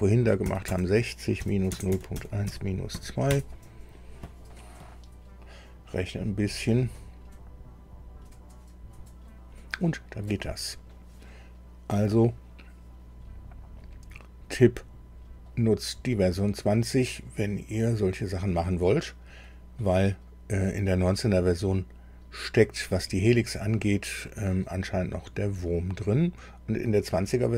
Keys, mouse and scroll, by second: 0.4 KP_6, 0.7 KP_0, 1.4 KP_Subtract, 1.7 KP_0, 1.9 KP_Decimal, 2.1 KP_1, 2.5 KP_Subtract, 2.9 KP_2, 3.3 KP_Enter, 10.2 click, 24.2-27.1 drag.